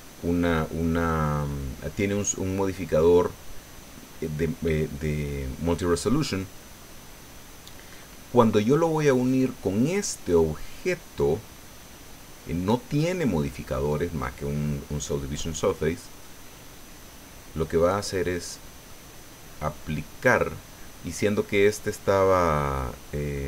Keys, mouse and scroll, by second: 9.1 right click, 9.9-14.6 drag, 15.7-16.1 scroll down 2, 16.2-19.1 drag.